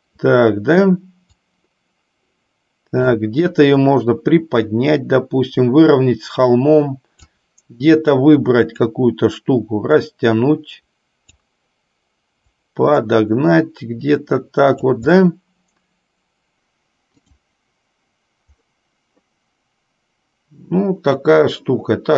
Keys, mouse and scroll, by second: 1.7-3.4 drag, 4.2-7.7 drag, 10.2-11.7 drag, 12.8-15.2 drag, 15.4-16.8 middle drag, 17.5 click.